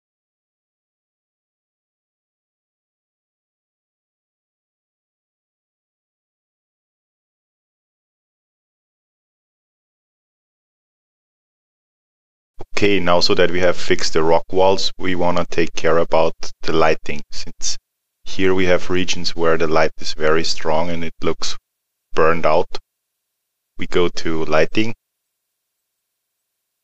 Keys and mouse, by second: 0.3 click, 0.6 alt+middle click, 0.8 click, 1.0 middle click, 1.1 click, 1.4 middle click, 1.4 click, 1.7 alt+middle click, 1.8 click, 2.0 alt+middle click, 2.2 middle click, 2.3 click, 2.7 middle click, 2.8 click, 3.1 middle click, 3.6 middle click, 3.6 click, 4.0 alt+middle click, 4.3 click, 4.6 alt+middle click, 4.7 click, 4.8 alt+middle click, 4.9 click, 5.2 alt+middle click, 5.4 click, 5.5 middle click, 5.6 click, 5.9 alt+middle click, 6.1 alt+middle click, 6.4 click, 6.9 middle click, 6.9 click, 7.6 alt+middle click, 8.3 alt+middle click, 8.5 click, 9.2 middle click, 9.3 click, 9.7 click, 10.4 middle click, 11.4 middle click, 11.8 middle click, 12.5 click, 24.6 click.